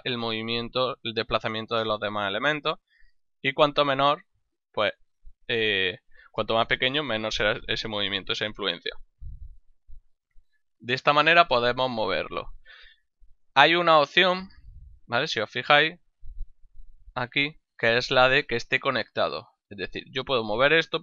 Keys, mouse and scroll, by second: 15.2 right click, 16.8 click, 18.3 click, 20.3 g.